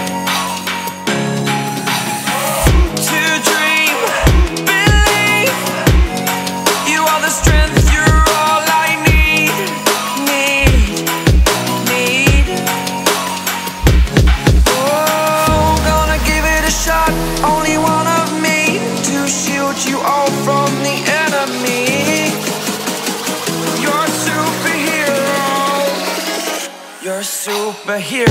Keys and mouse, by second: 0.5 click, 2.4 ctrl+click, 3.7 ctrl+d, 4.5 click, 5.1-21.5 ctrl+drag, 21.5 ctrl+d, 23.5 click, 27.1 shift+click, 27.8 shift+click.